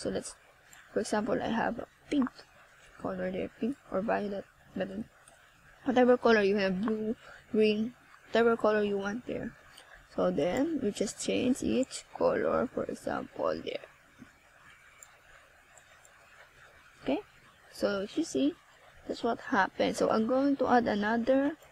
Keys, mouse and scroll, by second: 3.4 click, 11.4 click, 16.1 click, 19.0 click, 20.1 click.